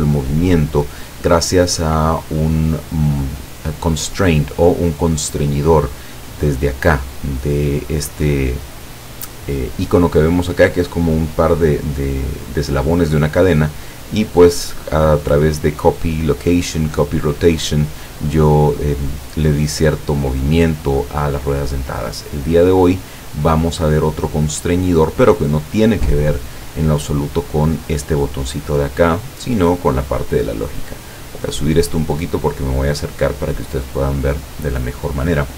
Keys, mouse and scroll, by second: 5.6 click, 14.1 click, 17.9 click, 24.3-25.6 drag, 29.4-32.0 drag, 32.2-32.8 scroll up 2, 33.9-35.0 drag.